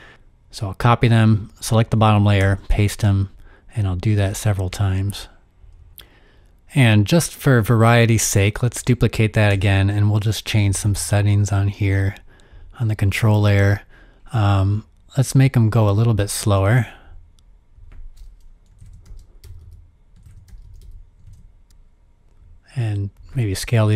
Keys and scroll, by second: 2.4 super+v, 4.3 super+v, 6.0 super+v, 9.5 super+d, 10.8 super+d, 17.6-19.8 typing.